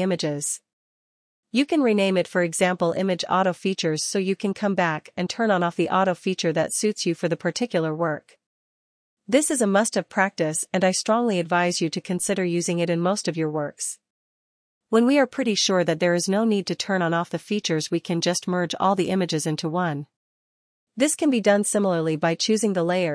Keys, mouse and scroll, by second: 0.9-7.3 typing, 12.7 click, 17.5 ctrl+z, 18.0 ctrl+z, 18.6 ctrl+z, 20.9 ctrl+click, 21.2 ctrl+click, 21.9 ctrl+click.